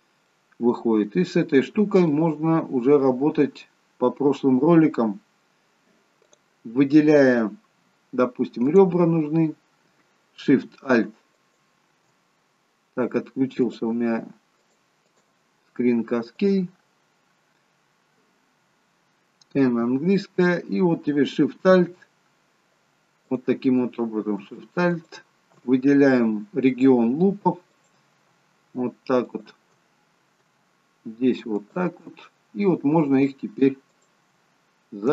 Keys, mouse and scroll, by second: 16.6 click, 23.4 click, 25.1 alt+shift+click, 30.1-31.7 scroll up 1, 31.7 alt+shift+click, 31.7-32.3 scroll up 3, 32.5-33.2 scroll down 3, 34.0 alt+shift+click.